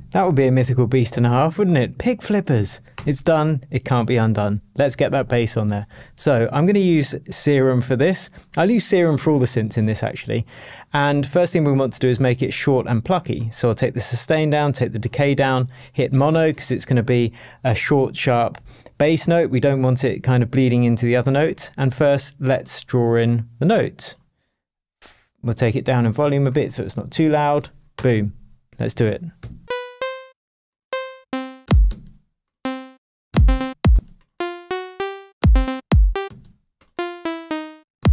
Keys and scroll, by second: 2.9 Return, 5.8 Left, 26.9-27.8 typing, 27.9 Return, 29.4 p, 31.2 shift+Down, 32.8 space, 33.3 space, 34.6 Up, 35.3 space, 37.2 Down, 38.0 space.